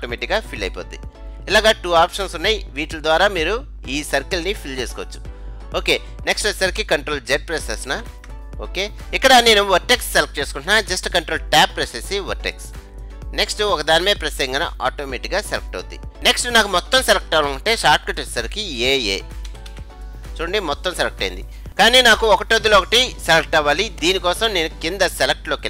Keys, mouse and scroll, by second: 0.1-1.9 drag, 8.1 ctrl+z, 11.8 ctrl+Tab, 15.5 right click, 19.6 a, 19.8 a.